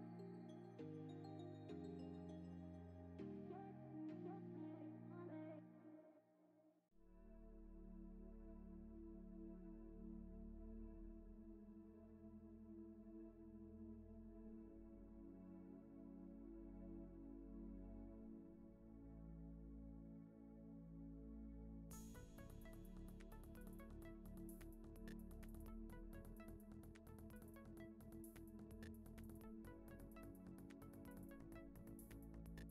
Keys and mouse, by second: 0.1 alt+click, 0.3 middle click, 0.4 g, 1.6 ctrl+KP_Add, 1.6 ctrl+KP_Add, 1.8 ctrl+KP_Add, 1.9 ctrl+KP_Add, 3.0 middle click, 3.5 middle click, 3.7 g, 5.1 middle click, 5.3 Tab, 6.1 middle click, 6.6 Tab, 6.7 middle click, 6.9 2, 10.2 shift+d, 10.5 p, 10.7 Tab, 11.1 click, 11.2 Tab, 11.3 a, 11.7 f, 11.9 shift+middle click, 15.3 middle click, 15.9 3, 16.0 x, 17.1 3, 17.2 click, 17.5 a, 17.6 middle click, 17.8 e, 18.7 Tab, 18.9 click, 19.0 middle click, 19.6 click, 19.7 Tab, 20.0 2, 20.2 click, 20.6 g, 21.8 middle click, 22.4 Tab, 22.5 middle click, 23.0 Tab, 24.8 i, 24.9 ctrl+z, 25.2 shift+d, 25.5 p, 25.6 Tab, 25.8 click, 25.8 Tab, 26.8 a, 27.0 i, 31.1 middle click, 31.1 x, 31.5 click, 31.6 x, 32.2 1, 32.6 g.